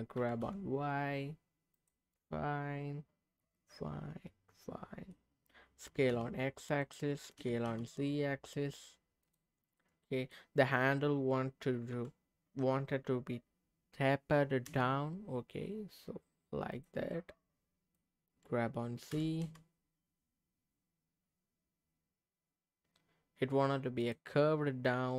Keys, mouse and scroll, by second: 0.2 g, 0.4 y, 1.7 click, 2.1-5.1 middle drag, 5.8 s, 6.1 x, 6.8 click, 7.4 s, 7.6 z, 9.2 click, 9.8 middle click, 11.9 g, 14.7 z, 16.7 click, 17.1 middle click, 19.1 g, 19.4 z, 24.0 click.